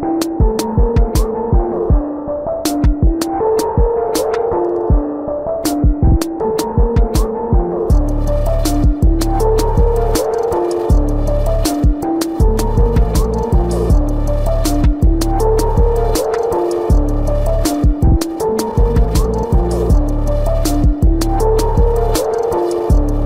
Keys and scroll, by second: 0.3 space, 1.5 ctrl+alt+z, 4.6 space, 6.1 ctrl+-.